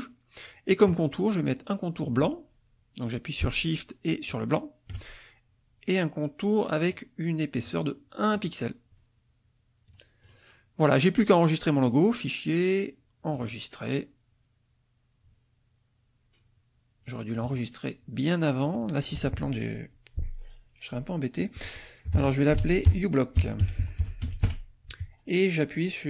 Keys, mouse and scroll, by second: 4.3 shift+click, 6.8 right click, 8.3 click, 9.8 click, 10.2 click, 11.9 click, 13.3 click, 17.4 click, 18.6 click, 22.1-24.9 typing.